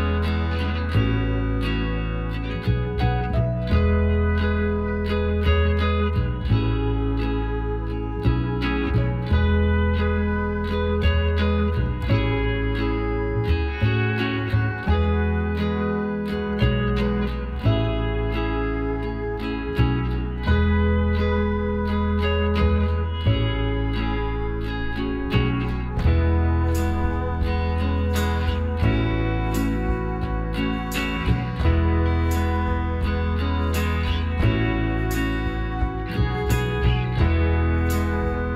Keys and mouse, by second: 2.6-4.5 drag, 4.2-10.9 right drag, 10.3 x, 12.1-13.8 middle drag, 15.8-17.6 drag, 16.9 right click, 17.3 middle click, 20.1 KP_7, 23.7-26.9 drag, 26.5 e, 28.6-33.5 middle drag, 33.6-35.3 drag, 36.4-38.5 middle drag, 37.4-38.5 drag.